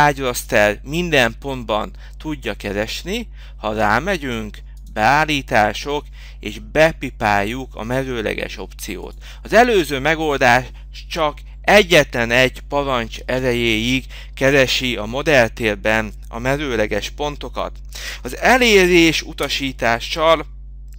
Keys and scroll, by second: 11.8 Return, 14.6 Escape.